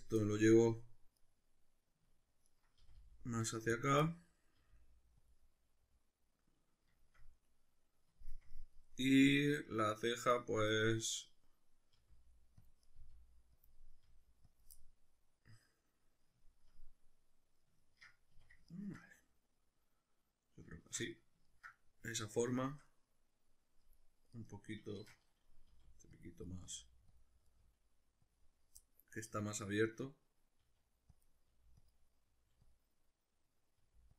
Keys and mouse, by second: 0.0 click, 0.2-1.2 middle drag, 1.2 right click, 2.4 ctrl+right click, 2.8 g, 3.8 click, 4.0-5.3 middle drag, 4.6 g, 5.3 click, 5.4-10.7 middle drag, 10.7 right click, 11.9 g, 12.7 click, 12.9 right click, 13.0 g, 13.7 click, 14.1 g, 14.6 click, 14.7-18.6 middle drag, 18.3 a, 18.7-20.8 ctrl+middle drag, 20.8 shift+Tab, 21.1-24.3 middle drag, 24.3 right click, 25.0 shift+Tab, 25.1-26.3 middle drag, 25.7 g, 26.3 click, 26.5 right click, 26.7 right click, 26.7 g, 27.2 click, 27.5 right click, 27.6 g, 28.4 click, 28.8-31.3 middle drag, 30.6 g, 31.3 click, 31.5 g, 31.9 click, 32.3 g, 32.7 click, 32.9 middle click, 33.8 g.